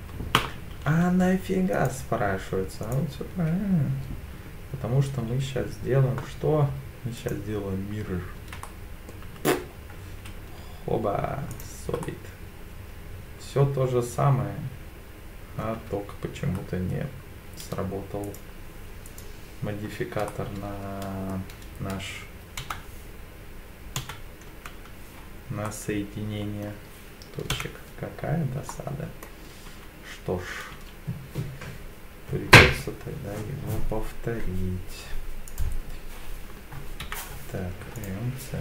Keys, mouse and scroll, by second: 1.7 click, 2.8-7.3 drag, 8.6 middle click, 9.2 Tab, 9.9-10.4 scroll down 2, 10.5 z, 12.0-15.6 middle drag, 15.7 Tab, 16.5-18.2 scroll up 2, 18.2 click, 18.2 scroll up 1, 19.1 alt+click, 20.3-21.3 middle drag, 22.6 Insert, 24.0 KP_8, 24.5 KP_7, 25.6 scroll up 1, 25.7 middle click, 28.7 middle click, 28.7 KP_7, 29.7 e, 30.7 s, 35.5 click, 37.0 m.